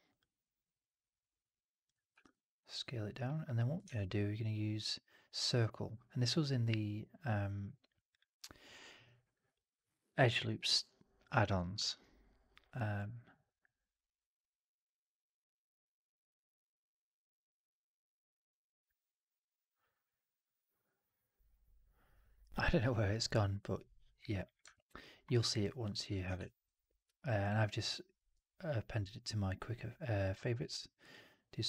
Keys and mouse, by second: 3.7 shift+Tab, 18.2-24.5 drag, 18.2-24.5 middle drag, 24.6 alt+middle click, 24.9 alt+middle click, 25.2 alt+right click, 25.5 alt+click, 26.2 shift+Tab.